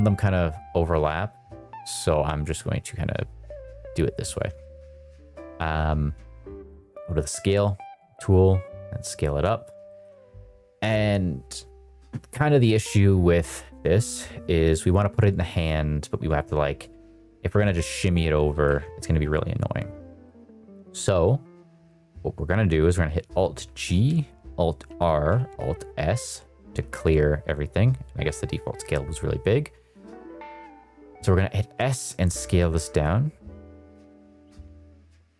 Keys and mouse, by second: 0.6 click, 2.5 drag, 4.5 shift+middle drag, 6.7 click, 7.8 click, 9.8 shift+middle click, 16.7 click, 18.7 ctrl+z, 20.2 shift+middle drag, 23.5 alt+g, 24.8 alt+r, 25.9 alt+s, 30.9 s, 33.9 click, 34.6 s.